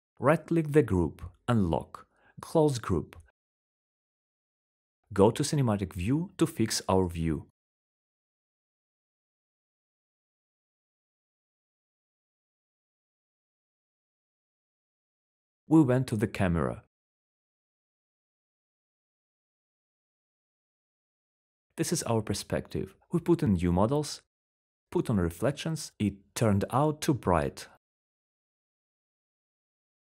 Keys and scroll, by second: 4.9-6.7 typing, 18.2-23.6 typing, 20.3 alt+4.